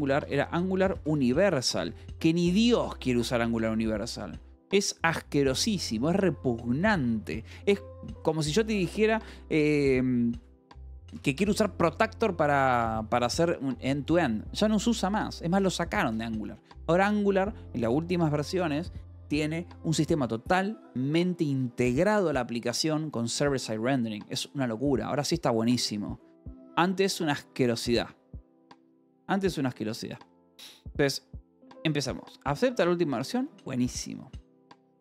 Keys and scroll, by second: 0.0-3.5 typing, 8.2-13.7 typing, 31.9 k, 32.5 l, 33.2 j, 33.7 a.